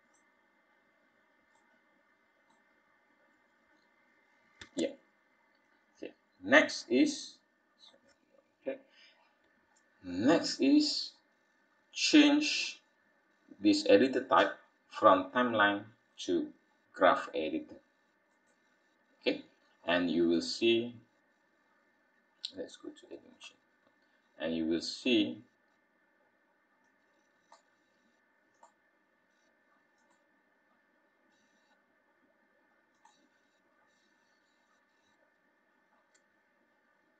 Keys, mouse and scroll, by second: 1.5 middle click, 4.5 space, 5.6 click, 7.8 click, 19.6-20.1 scroll down 3.